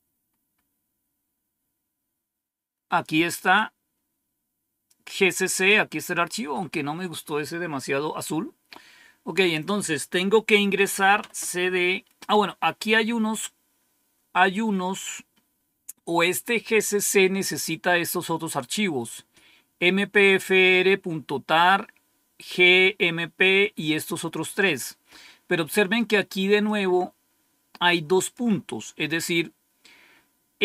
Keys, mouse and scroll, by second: 0.2-1.1 scroll up 1, 1.1-1.5 scroll up 1, 1.5-2.1 scroll down 1, 3.5-6.3 drag, 6.8-9.5 scroll down 2, 9.5 click, 10.5-11.5 typing, 14.5-15.1 scroll down 1, 26.6-28.3 drag.